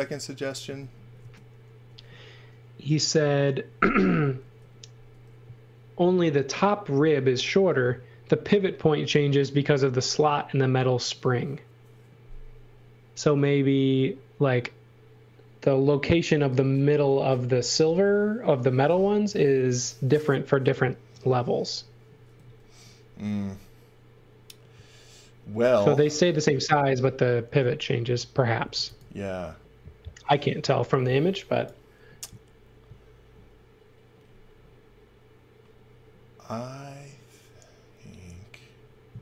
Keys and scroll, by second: 1.4 space, 28.4-29.4 typing.